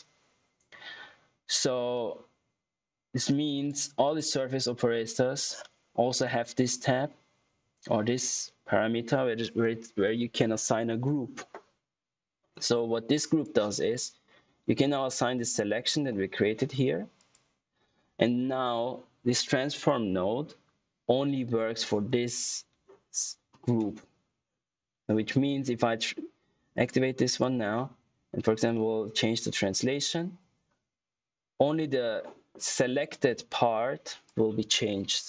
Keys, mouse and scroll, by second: 1.8 click, 13.0 click, 19.7 click, 26.6 click, 28.6 middle click, 34.2 click.